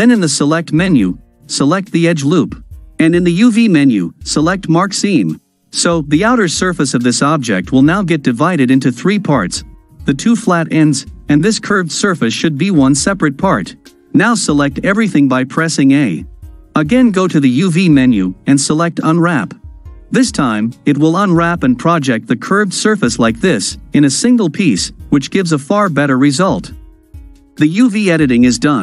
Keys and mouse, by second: 3.4-4.5 drag, 6.9 ctrl+click, 8.0-9.7 middle drag, 15.1 a, 17.5-19.2 drag.